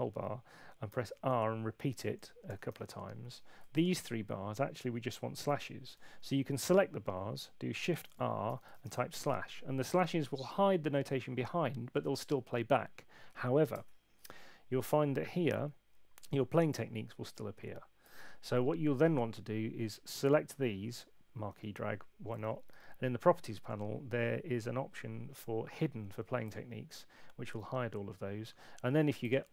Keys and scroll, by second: 0.9 r, 8.4-9.3 typing, 13.7 Return, 22.7 super+8.